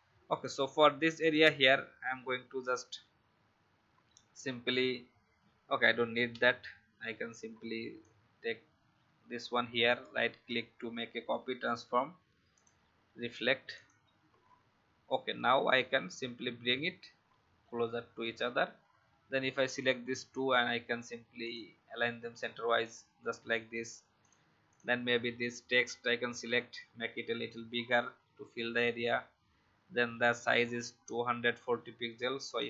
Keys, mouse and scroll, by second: 6.3 Delete, 8.0-9.4 alt+drag, 9.8 right click, 12.6 click, 15.0-15.7 Left, 16.3 Left, 19.6 shift+click, 32.4 click.